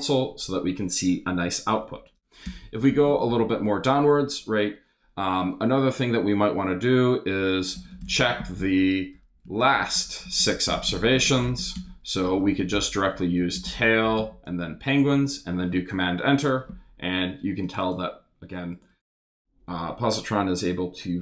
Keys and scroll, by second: 2.4 Return, 2.9 shift+3, 3.0 shift+space, 4.1 space, 7.2-14.9 typing, 15.0 super+s, 15.1 super+Return.